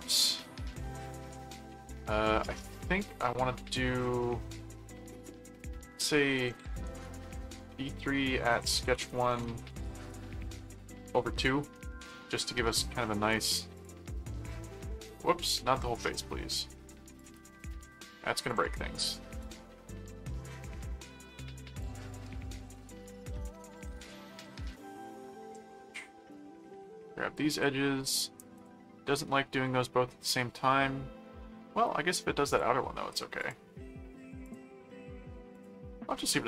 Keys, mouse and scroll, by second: 6.0-11.5 typing, 13.7 click, 15.4 click, 17.1 click, 18.4 click, 19.4 click, 20.7 middle click, 22.1 click, 22.7 click, 23.9 click, 24.3 middle click, 25.2 middle click, 26.3 click, 27.5 click, 28.5 click, 29.2 middle click, 30.2 middle click, 31.2 middle click, 32.5 click, 33.4 click, 34.4 click, 35.5 click, 36.1 middle click.